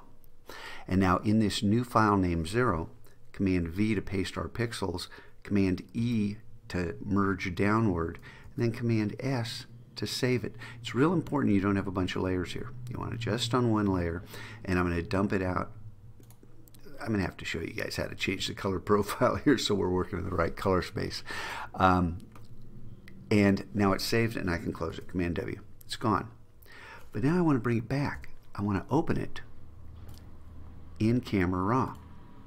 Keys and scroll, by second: 3.7 super+v, 6.1 super+e, 8.6 super+s, 25.1 super+w, 28.2 super+o.